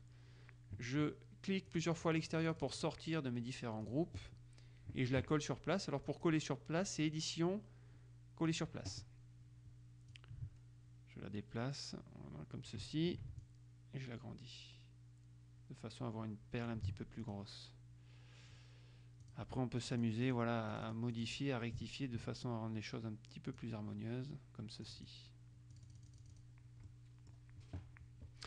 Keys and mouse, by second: 1.9-3.5 drag, 4.0 click, 6.3 click, 8.6 click, 10.3-13.3 ctrl+drag, 13.5-18.0 shift+drag, 19.5 click, 20.1-24.3 drag, 25.1 click, 25.9-27.1 drag.